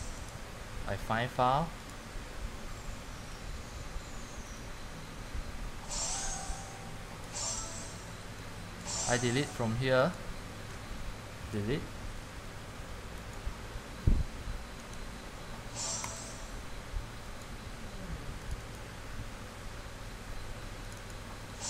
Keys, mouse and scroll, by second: 9.6 click, 10.3 click, 11.6 Delete, 13.6 click, 15.1 right click, 16.3 click.